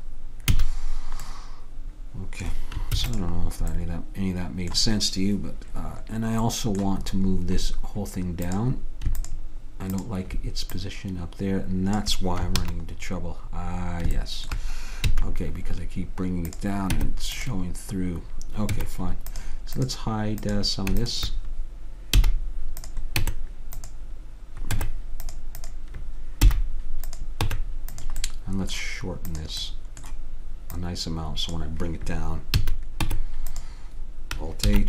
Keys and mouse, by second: 0.6 a, 3.0 ctrl+s, 8.6-12.6 drag, 12.7 ctrl+z, 15.1 a, 16.6 click, 17.0 Tab, 18.8 Tab, 19.9 click, 22.3 h, 23.3 Tab, 24.8 Tab, 25.7-28.9 drag, 26.6 h, 27.5 Tab, 29.4-32.6 drag, 32.6 a, 33.2 Tab, 33.7 Tab, 34.7 alt+h.